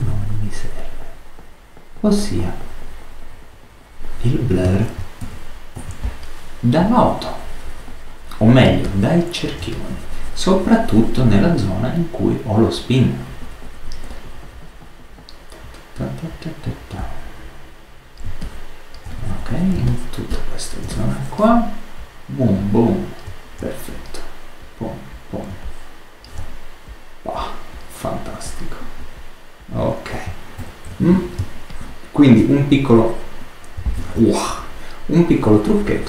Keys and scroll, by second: 4.9 super+space, 5.1 super+-, 30.5 super++, 31.3 super+space, 33.8 super+z.